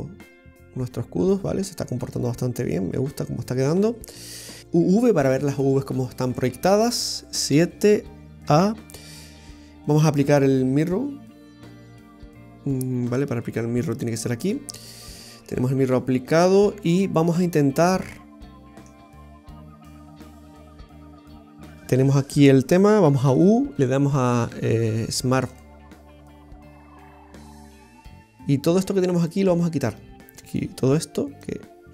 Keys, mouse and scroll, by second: 6.4 middle click, 7.6 KP_7, 8.6 a, 11.8 click, 13.2 Tab, 13.9 click, 15.1-15.5 scroll down 2, 15.5 Tab, 16.3-16.7 scroll up 3, 16.8 Tab, 17.4 middle click, 21.0 Tab, 23.3 u, 28.4 right click, 29.2 click, 29.9 right click, 31.5 click.